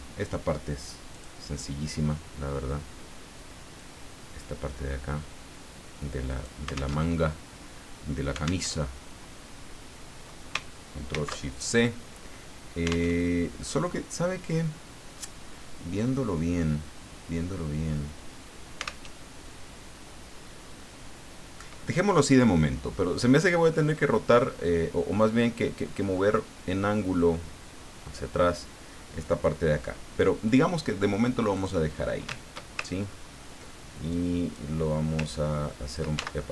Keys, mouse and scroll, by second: 1.1 click, 3.8-6.6 drag, 6.9 alt+Tab, 8.6 alt+Tab, 11.1 ctrl+shift+c, 13.1 alt+Tab, 19.0 alt+Tab, 31.5 click, 33.1-33.4 ctrl+scroll up 2, 34.1 click, 35.3 ctrl+click, 36.1 ctrl+z.